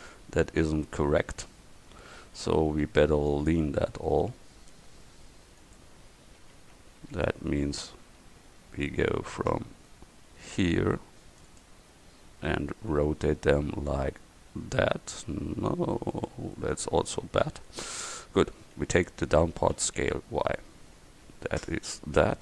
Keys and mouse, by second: 2.0 a, 2.8 c, 5.6-7.1 drag, 6.6 a, 7.1 c, 8.1 a, 8.7 c, 13.0 r, 18.1-19.8 drag, 19.8 s.